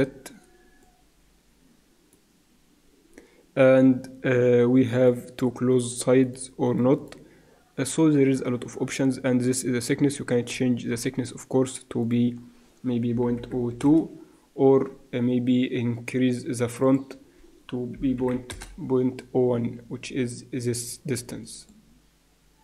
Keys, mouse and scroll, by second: 0.8-2.6 drag, 4.9-8.8 drag, 10.5-12.0 middle drag, 12.0-13.6 drag, 17.0-18.5 drag, 21.6-22.6 drag.